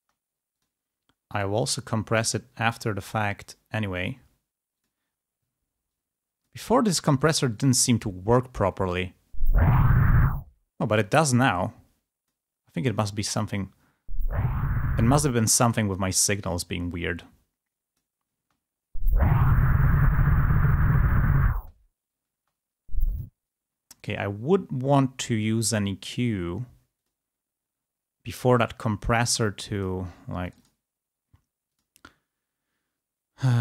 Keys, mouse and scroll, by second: 0.3 space, 0.8 click, 1.4 right click, 5.1 click, 6.2 click, 7.7 click, 9.3 space, 10.2 space, 11.4-12.6 drag, 13.0 click, 15.4 click, 15.4 space, 16.6-18.3 drag, 18.5 space, 20.2-21.7 drag, 21.7 space, 22.8 space, 24.1 right click, 29.2 click, 31.8 click.